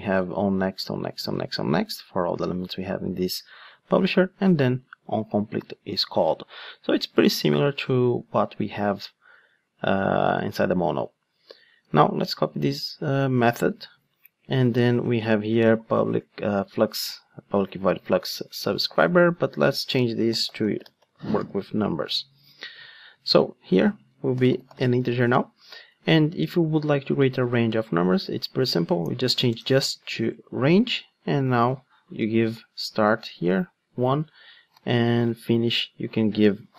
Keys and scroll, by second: 12.3 super+v, 12.5 super+c, 13.6 super+v, 29.5 alt+BackSpace, 30.3 alt+BackSpace, 30.4 Return.